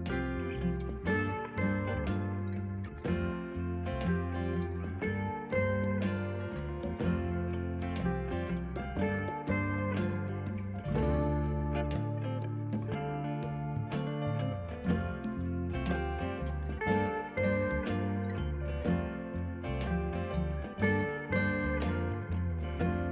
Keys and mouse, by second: 0.1 right click, 0.5 click, 2.6 KP_2, 2.8 Return, 3.6 click, 3.9 r, 4.5 Right, 4.6 Left, 4.8 click, 5.2 KP_9, 5.3 Return, 5.7 click, 8.3 Return, 10.1 Right, 10.2 Left, 10.4 click, 10.8 KP_9, 10.9 Return, 12.5 click, 13.9 click, 14.5 h, 14.7 Return, 15.0 click, 16.7 ctrl+r, 16.9 click, 18.1 ctrl+shift+x, 18.2 click, 19.3 ctrl+r, 19.8 shift+click, 20.0 click, 21.5 ctrl+shift+x, 21.6 click.